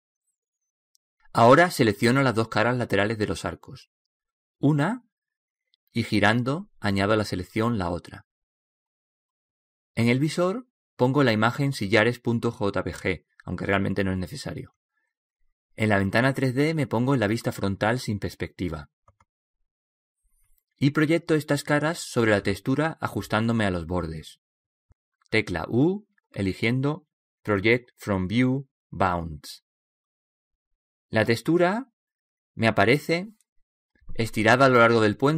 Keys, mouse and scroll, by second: 1.2-5.1 middle drag, 5.1-6.5 right drag, 5.7 middle click, 6.9-9.1 middle drag, 9.1-12.4 right drag, 12.6 click, 16.5 click, 21.4 KP_1, 28.6 u, 34.6-35.3 middle drag.